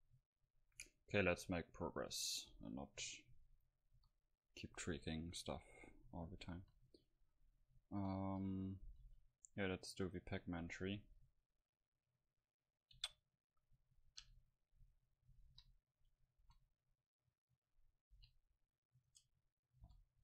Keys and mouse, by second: 0.0-1.5 drag, 1.5 middle click, 2.4-4.3 right drag, 3.7 KP_Decimal, 4.3 KP_5, 6.7 KP_1, 7.1 KP_5, 8.3 a, 9.1 shift+a, 13.0 KP_Decimal, 14.2 KP_Divide, 15.5 KP_1, 16.4 s, 17.6 click, 18.2 r, 19.1 Tab, 19.9 z.